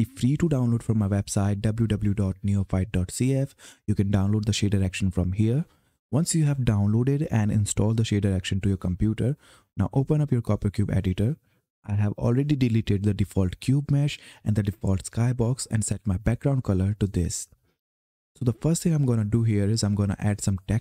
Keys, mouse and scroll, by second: 0.9-2.1 scroll down 1, 6.0-6.9 scroll down 1, 7.6 click, 16.6 click, 20.0 click.